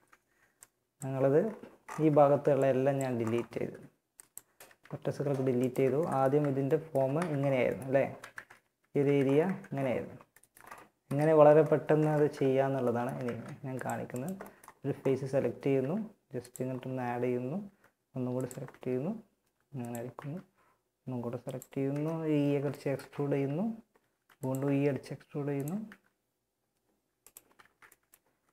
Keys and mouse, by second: 0.8 click, 1.2 a, 1.5 b, 2.6 x, 3.9 z, 5.6 f, 6.1 a, 6.4 z, 7.5 ctrl+Tab, 8.2 z, 8.6 Tab, 9.2 Tab, 10.7 KP_1, 12.4 ctrl+Tab, 15.0 e, 16.8 e, 18.0 s, 19.4 e, 21.1 KP_1, 23.4 e, 23.9 s, 25.2 e, 26.8 ctrl+z, 27.6 s.